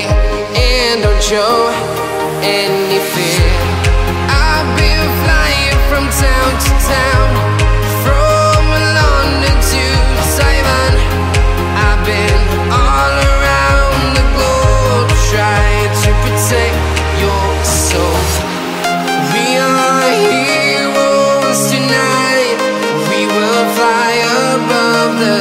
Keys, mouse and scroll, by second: 2.3 click, 3.6-4.0 scroll up 1, 4.0 click, 4.9 right click, 5.5 ctrl+j, 5.9 scroll down 1, 6.4 shift+click, 7.1-7.5 scroll, 8.1 right click, 8.4-9.0 scroll down 1, 10.0 scroll up 1, 10.0-12.1 shift+drag, 12.1-12.7 scroll up 1, 13.9-15.3 shift+drag, 15.3 scroll up 1, 17.1 shift+click, 18.6 p, 19.4 i, 20.2 Return, 20.8 right click, 21.7 click, 21.8 scroll down 1, 22.5-23.8 right drag, 23.8-24.2 scroll up 1, 24.2 click, 24.5 scroll down 1.